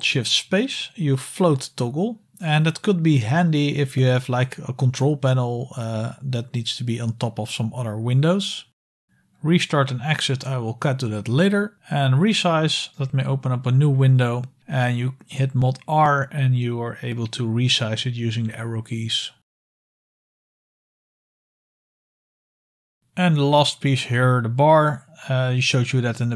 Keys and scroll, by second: 1.3 shift+super+space, 6.3 shift+super+space, 12.6 super+Return, 16.4 super+r, 19.1 Right, 20.5 Left, 20.7 Left, 21.0 Left, 21.4 Right, 21.6 Right, 21.9 Right, 22.0 Left, 22.0 Return, 22.6 super+q.